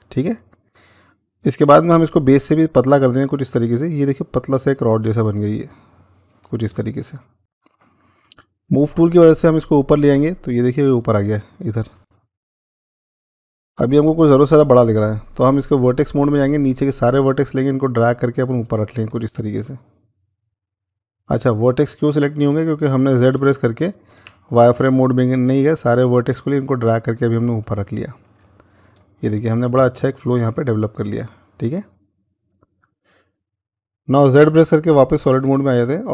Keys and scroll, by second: 20.6 ctrl+z, 23.3-24.0 z, 34.5-35.2 z.